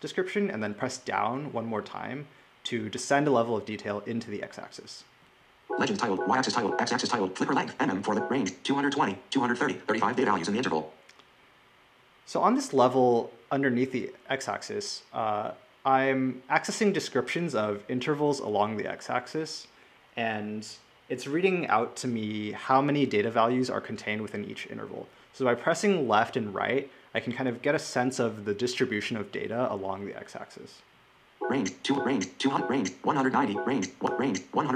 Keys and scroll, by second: 5.3 Left, 5.9 Left, 6.4 Left, 31.1 Left, 31.7 Left, 33.8 Left.